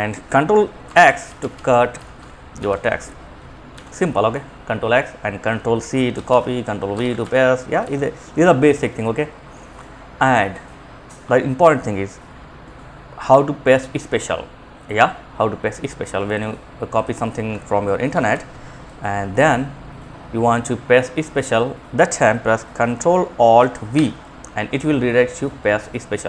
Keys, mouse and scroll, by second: 0.1 Home, 0.3 End, 0.5 Down, 0.6 Down, 0.7 Down, 1.2 Down, 1.8 ctrl+x, 2.9 ctrl+z, 5.3 ctrl+c, 5.6 ctrl+Down, 6.1 Return, 6.4 ctrl+v, 7.1 ctrl+z, 15.5 click, 16.3 click, 17.4 ctrl+c, 18.1 click, 23.2 ctrl+alt+v.